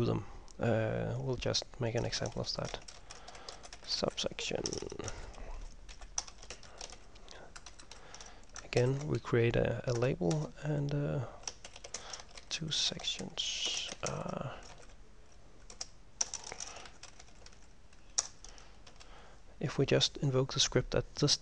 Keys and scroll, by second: 2.2 Return, 2.6-7.6 typing, 7.8 Home, 7.9 End, 8.9 ctrl+m, 10.1 Return, 10.5 Return, 11.6-19.0 typing, 21.3-21.4 typing.